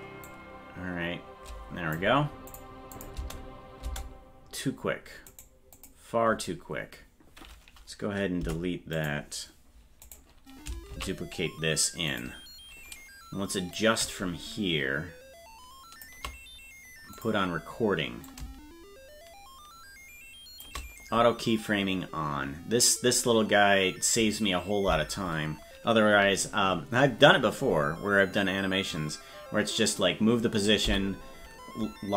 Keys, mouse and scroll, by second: 0.3-2.0 drag, 2.5 click, 3.2 space, 3.9 space, 5.3 right click, 5.8 click, 8.4 Delete, 10.0 right click, 10.9 shift+d, 13.7-16.0 drag, 17.2 click, 18.3-20.6 drag.